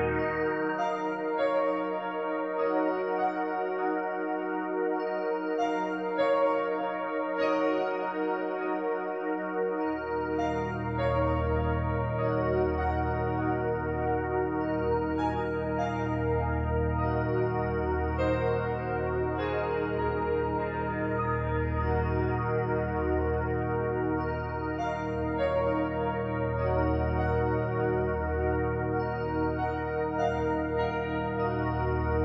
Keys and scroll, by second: 17.8 ctrl+i.